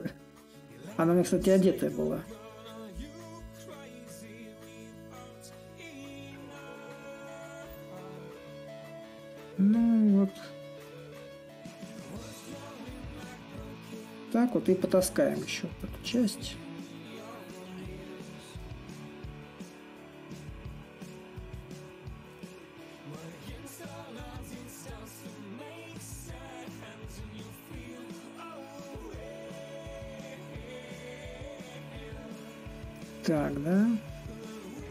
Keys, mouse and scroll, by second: 2.7-7.7 drag, 7.9-14.6 drag, 14.6 shift+a, 15.4-16.7 drag, 16.7 s, 18.3-23.3 drag, 24.8-29.8 drag, 29.9-34.9 drag.